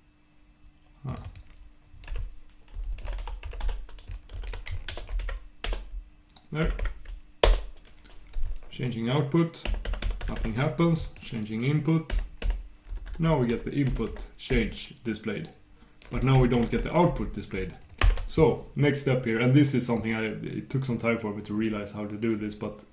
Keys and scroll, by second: 4.9 shift+super+Return, 9.6 super+\, 10.0 super+', 16.3 super+\, 16.5 super+\.